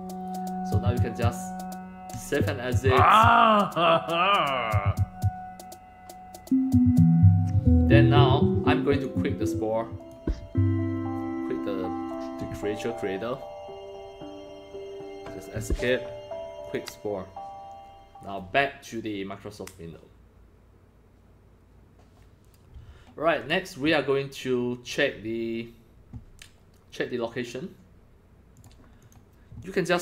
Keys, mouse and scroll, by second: 2.1 click, 8.9 click, 10.0 click, 15.6 Escape, 16.6 click, 21.7 click, 23.4 click, 23.7 click, 28.6 click, 29.0 click, 29.5-30.0 drag.